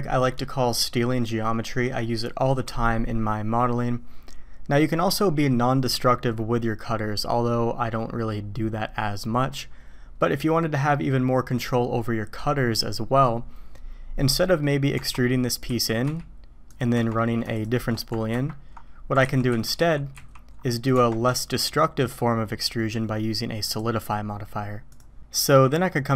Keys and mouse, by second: 14.4 drag, 14.9 Tab, 15.7 a, 16.1 e, 16.9 Tab, 18.3 ctrl+KP_Subtract, 19.2 ctrl+z, 19.5 ctrl+z, 19.8 ctrl+z, 20.1 ctrl+z, 20.9 Tab, 23.6-25.0 drag, 25.3 middle click.